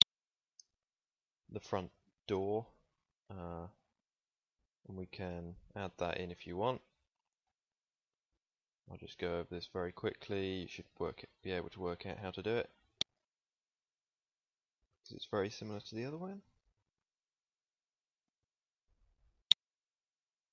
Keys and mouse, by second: 1.8 right click, 8.5 x, 9.8 click, 16.0 middle click, 17.3 middle click, 18.2 f, 18.7 middle click, 19.6 ctrl+s.